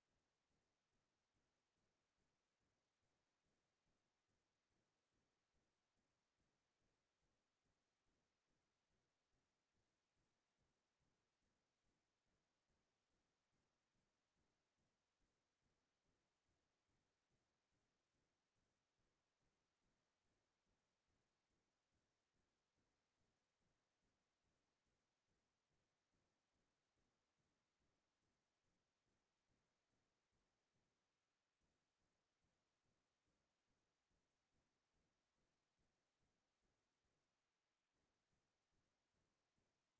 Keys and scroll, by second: 6.1 ctrl+i, 12.2 ctrl+space, 13.0 ctrl+space, 13.6 ctrl+t, 18.8 Return, 20.9 ctrl+space, 22.2 ctrl+space, 38.0 ctrl+space.